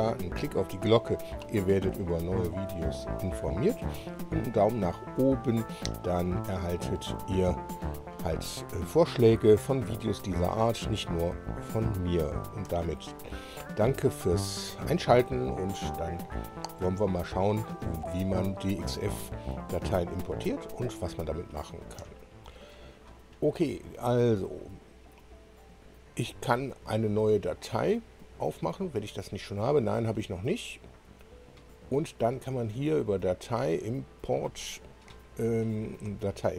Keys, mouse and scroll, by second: 24.2 click, 26.5 Escape, 28.5 click, 30.2 click, 30.8 click, 32.8 click, 34.3 click.